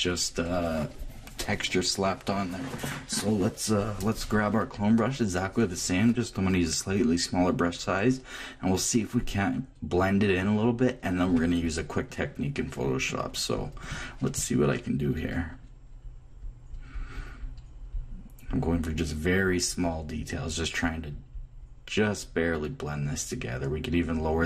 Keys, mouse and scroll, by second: 11.3 click, 13.5-24.4 drag.